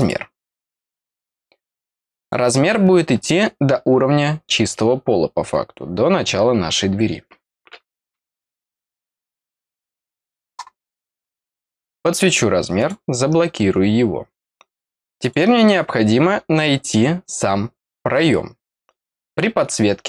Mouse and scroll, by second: 0.9 click, 2.1 click, 3.2 middle click, 11.4 click, 12.7 click, 15.1 click, 16.2-17.2 scroll down 2.